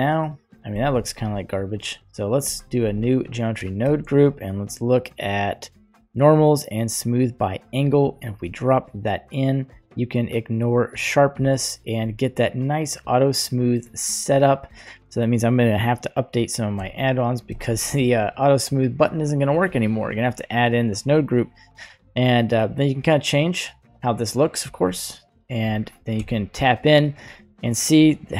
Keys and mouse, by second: 1.6 ctrl+z, 2.4 click, 3.0 middle click, 3.8 shift+a, 9.3 click, 12.1-13.8 middle drag, 14.3-16.8 middle drag, 17.0-17.6 shift+middle drag, 18.2-19.7 ctrl+middle drag, 20.8 click, 22.6-24.6 drag, 25.6 click, 26.2 Tab, 27.5 middle click.